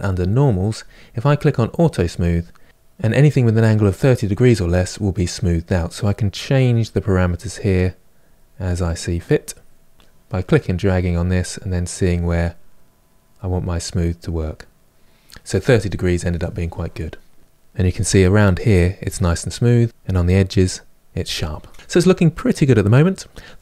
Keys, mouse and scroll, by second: 1.6 click, 5.6-12.6 drag, 17.4-23.6 middle drag.